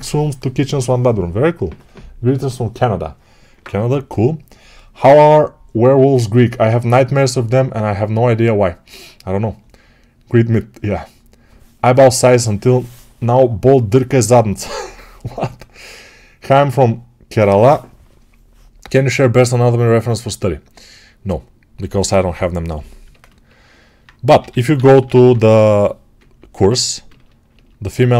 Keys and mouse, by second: 22.9-24.2 alt+drag, 24.2-27.9 right drag, 24.2 g, 24.7 ], 24.8 ], 27.9-28.1 right drag.